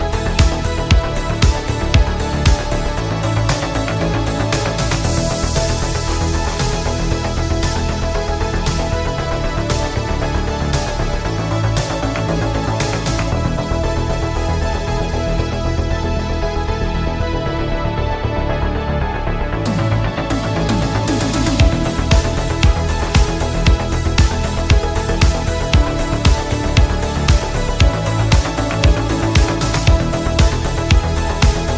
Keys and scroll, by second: 22.6 ctrl+z, 23.3 ctrl+z.